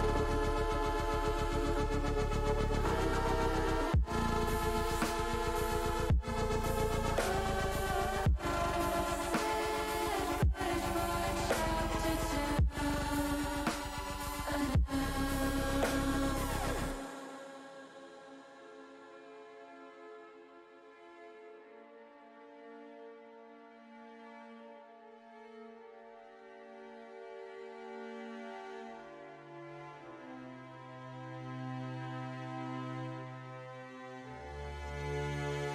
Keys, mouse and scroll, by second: 0.4-1.4 drag, 2.5 click, 4.3-6.3 drag, 6.9-8.0 drag, 8.2-10.6 middle drag, 10.9-12.1 drag, 12.5 click, 14.5 click, 16.0 ctrl+z, 17.0-18.1 drag, 18.8-19.9 drag, 20.6-22.6 drag, 23.0-24.7 drag, 27.1 click, 28.6 click, 29.9-31.2 drag, 32.8 alt+shift+click, 34.1 s, 35.4 click.